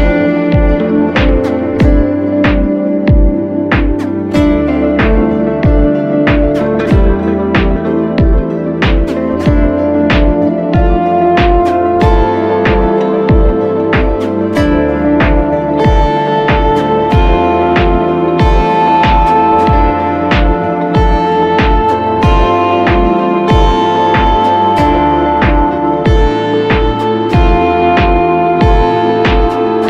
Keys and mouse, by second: 0.3 click, 2.2 click, 3.9 click, 4.8-7.9 drag, 8.8-11.8 ctrl+middle drag, 12.9-15.1 ctrl+middle drag, 15.1-18.2 drag.